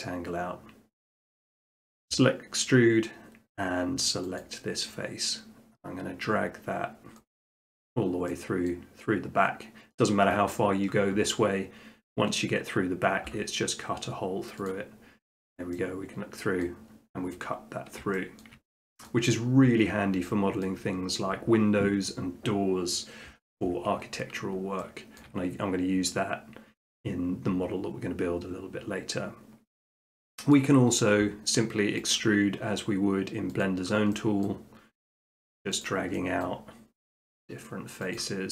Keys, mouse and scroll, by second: 1.2-2.2 drag, 4.4 click, 7.2 middle click, 7.5 middle click, 8.4 middle click, 8.8 middle click, 14.7 click, 15.2 middle click, 15.4 middle click, 16.6 middle click, 17.6 middle click, 18.4 shift+middle click, 19.1 middle click, 20.6 shift+middle click, 24.6 shift+middle click, 25.3 shift+middle click, 27.8-29.1 middle drag, 29.2-30.3 middle drag, 30.5-31.6 middle drag, 32.1 click, 33.6 click, 34.4 middle click, 35.1 click, 35.9 click, 36.4 middle click, 36.6 scroll, 37.2 click, 38.4 middle click.